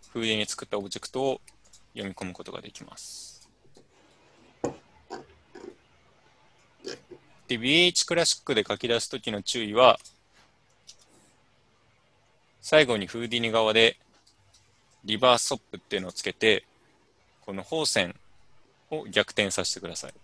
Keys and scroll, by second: 10.9 alt+Tab.